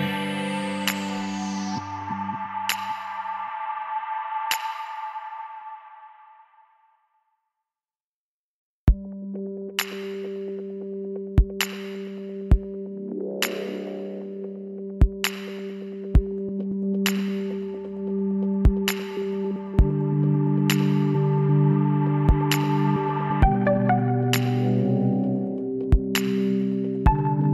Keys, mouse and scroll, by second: 0.4 KP_1, 3.2 r, 6.6 click, 7.2 g, 12.2 r, 14.9 r, 16.5 g, 19.8-22.9 middle drag, 22.9 z, 25.0-26.9 drag, 26.0 middle click, 27.1 b.